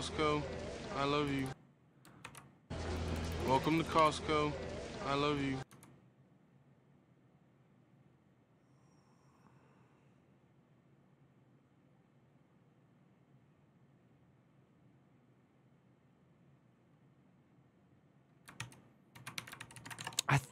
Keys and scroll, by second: 1.0 ctrl+u, 2.0 ctrl+d, 2.7-5.4 typing, 18.3 ctrl+c, 18.9 ctrl+a, 19.1-20.2 typing, 19.3 ctrl+c.